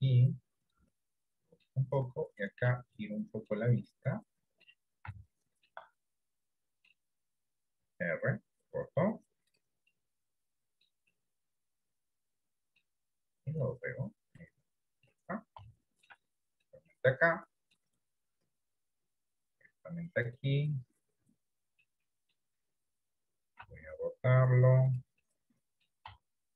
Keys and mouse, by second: 0.8 click, 1.8 middle click, 3.1 middle click, 3.9 middle click, 5.2 shift+middle click, 6.1 middle click, 7.9 r, 10.0-11.2 middle drag, 11.3-12.9 middle drag, 13.7 click, 14.9 middle click, 15.9 shift+middle click, 17.1 middle click, 18.5 click, 19.8 middle click, 21.0-22.3 middle drag, 22.6 middle click, 23.8 r, 25.4 middle click, 26.3 middle click.